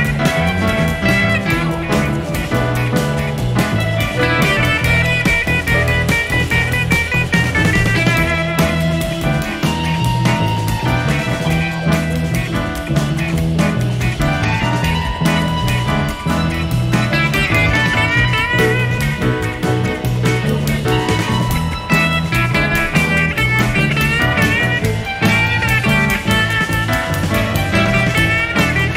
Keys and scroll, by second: 2.9-3.9 typing, 5.4 F7, 6.6 F1, 7.0 space, 7.6 shift+F6, 16.9 F1, 18.5 F1, 19.1 shift+F6, 26.4 F1.